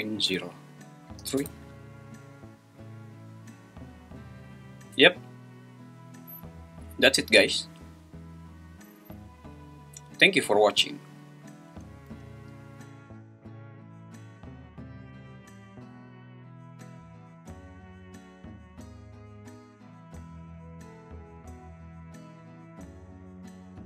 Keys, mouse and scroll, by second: 12.1 space, 20.0 space, 22.3 `.